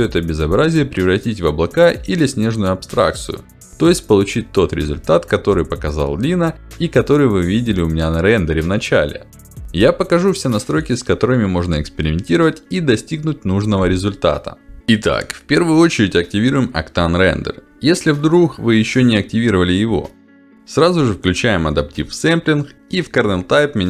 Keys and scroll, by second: 0.6 g, 2.9 g, 4.8 g, 8.3 g, 9.4 shift+d, 10.3 shift+d.